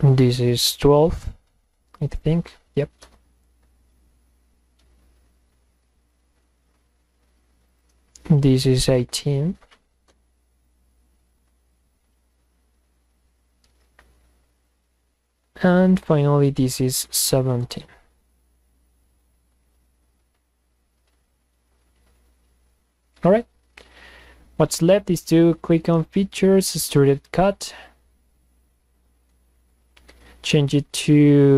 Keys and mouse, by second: 6.0 click, 7.8 drag, 8.8 click, 10.1 Return, 14.6 click, 16.1 click, 17.7 Return, 25.6 click, 26.5 click.